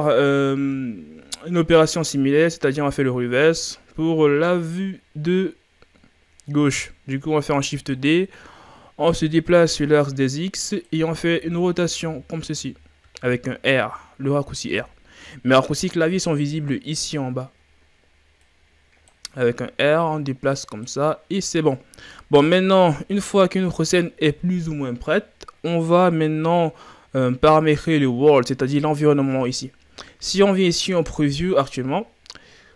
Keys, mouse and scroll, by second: 0.1-0.5 ctrl+scroll down 2, 7.5 shift+d, 9.5-11.3 drag, 11.3 r, 18.5-23.0 drag, 23.0-27.8 middle drag, 27.8-29.4 ctrl+scroll up 2, 32.0 click.